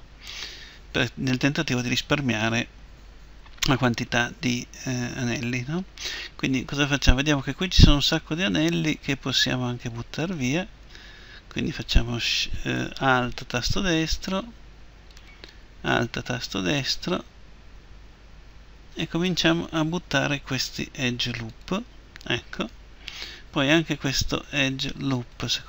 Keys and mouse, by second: 9.8-19.7 right drag, 19.7 Delete, 25.2-25.6 right drag.